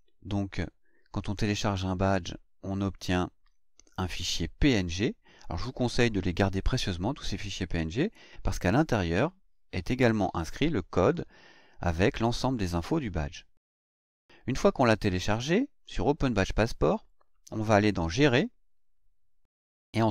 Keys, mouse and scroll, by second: 1.6 click, 2.9 click, 4.7 click, 15.8 click, 18.1 click.